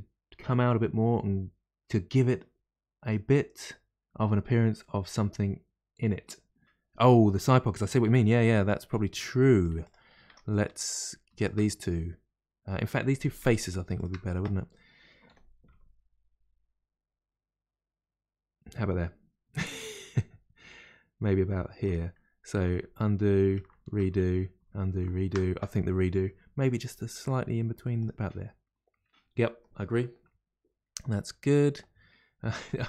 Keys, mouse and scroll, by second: 8.6-9.4 scroll down 2, 9.4-9.8 middle drag, 9.8 click, 10.2 Tab, 10.5 middle click, 10.9 click, 11.4 shift+click, 13.4 3, 13.5 click, 14.0 shift+click, 15.3 g, 15.4 g, 22.6 ctrl+z, 23.7 ctrl+shift+z, 24.6 ctrl+z, 25.2 ctrl+shift+z, 26.6 g.